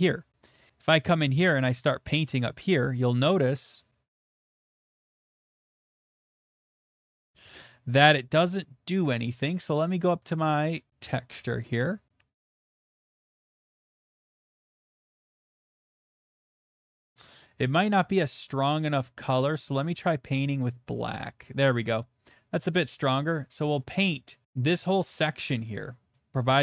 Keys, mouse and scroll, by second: 1.1 middle click, 1.1 middle click, 1.5 shift+middle click, 2.9 shift+middle click, 2.9 click, 4.1 click, 5.5 click, 6.2-7.0 scroll, 10.1 click, 10.5-11.5 scroll, 10.8 middle click, 13.1 click, 13.5 click, 14.0 middle click, 14.7 middle click, 14.8 middle click, 14.8 middle click, 16.4 click, 17.0 middle click, 17.6 middle click, 17.6 middle click, 17.6 middle click, 17.6 middle click, 17.7 middle click, 17.9 middle click, 18.0 middle click, 20.0 click, 21.4 click, 21.6 middle click, 21.6 middle click, 21.7 middle click, 21.9 middle click, 22.0 middle click, 22.0 middle click, 22.4 middle click, 24.0 click, 24.4 click.